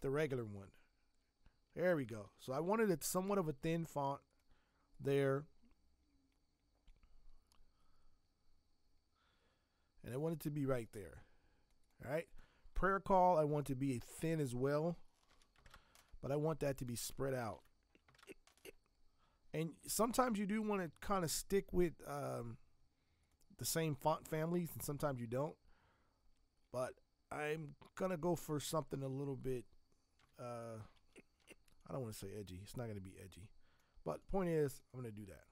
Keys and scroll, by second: 2.2 ctrl+t, 3.0 Escape, 13.1 t, 15.2 ctrl+x, 15.6 ctrl+Return, 17.4 ctrl+v, 18.1 ctrl+Return, 30.1 v, 30.9 Escape, 31.3 v.